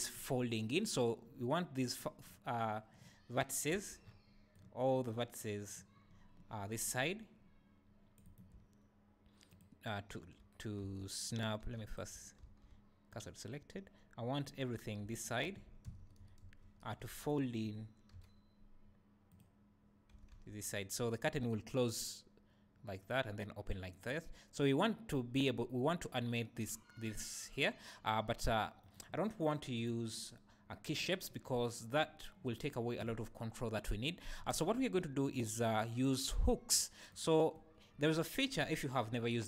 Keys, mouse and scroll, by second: 3.4-4.1 scroll down 1, 4.1 c, 8.3 right click, 9.5 shift+click, 10.8 Tab, 11.7 Tab, 11.8 click, 12.4 shift+s, 15.1 alt+click, 15.8 ctrl+KP_Add, 18.1 ., 20.1 s, 28.9 right click, 29.7 click, 35.5 click, 37.1 click.